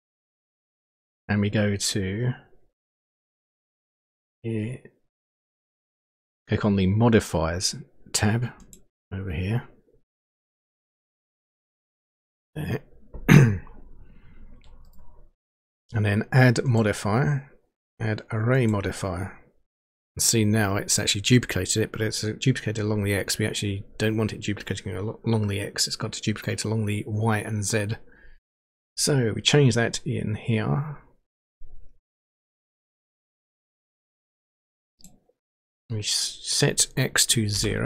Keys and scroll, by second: 37.5 0.